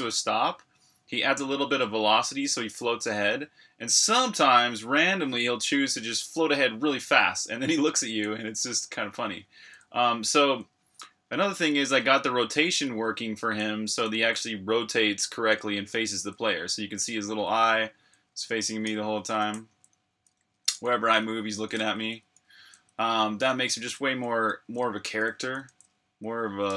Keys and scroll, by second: 0.0-2.7 typing, 7.3-8.0 typing, 9.2-22.9 typing, 26.5-26.7 typing.